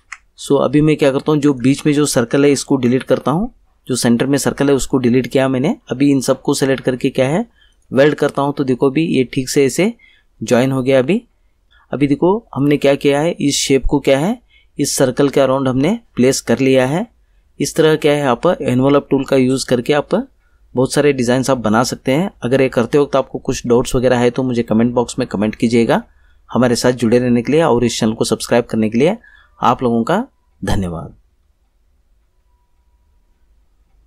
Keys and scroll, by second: 2.8 Delete.